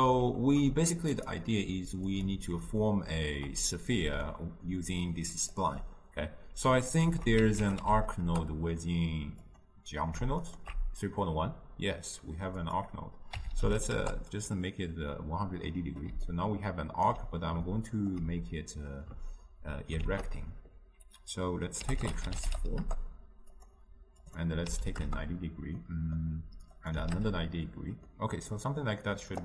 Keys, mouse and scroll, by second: 2.3 click, 2.9-4.4 ctrl+middle drag, 4.4-8.3 drag, 8.3 ctrl+a, 10.5-15.2 alt+shift+drag, 15.2-16.4 middle drag, 16.4-17.9 right drag, 17.9-22.9 ctrl+middle drag, 22.9 ctrl+a, 25.1 click, 25.9-27.2 middle drag, 27.2 click, 28.1-29.4 middle drag.